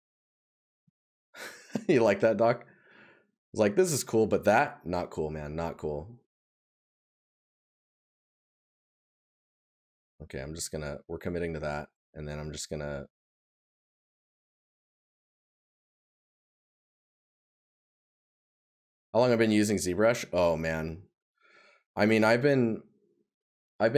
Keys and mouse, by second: 10.0 right click, 15.8 right click.